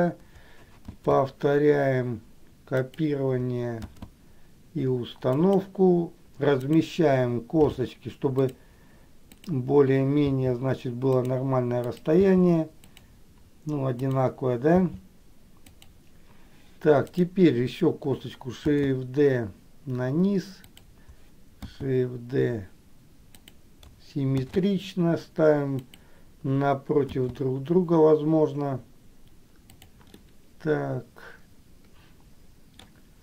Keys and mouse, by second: 4.2 shift+d, 6.9 click, 9.6 click, 19.0 shift+d, 27.5 shift+d, 30.5-33.0 middle drag.